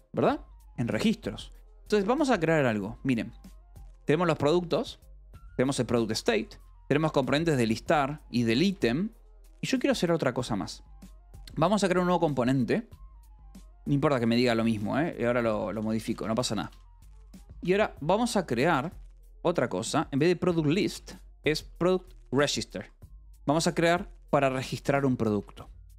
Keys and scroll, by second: 2.4-5.2 typing, 4.4 Escape, 6.0 Escape, 6.2 k, 6.6 j, 7.1 j, 7.7 k, 8.0 Escape, 9.1 shift+v, 9.2 Escape, 9.6 k, 11.6 o, 13.4 ctrl+g, 14.1 Escape, 14.4-16.2 typing, 17.9 l, 18.6 c, 18.7 Escape, 18.9 h, 20.4-23.8 typing, 24.9 shift+v, 25.2 Escape, 25.4 l.